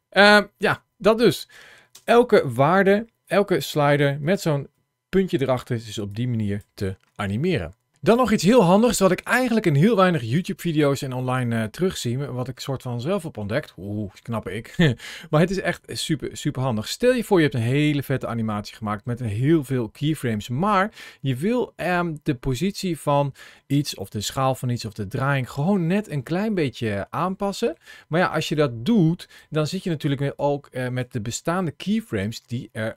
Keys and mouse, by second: 1.7 space, 5.9 click, 11.7-13.3 middle drag, 15.6-21.7 drag, 26.4-27.5 middle drag, 28.3 click, 30.2 click.